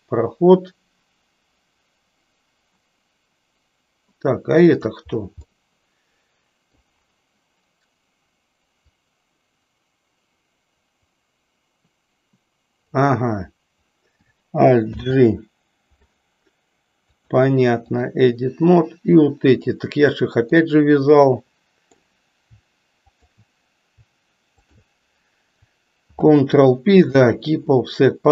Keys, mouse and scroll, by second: 5.6-6.9 middle drag, 9.0-13.1 drag, 17.0-18.2 drag, 19.4 click, 20.6-22.1 middle drag, 23.1 shift+click, 26.0 ctrl+p.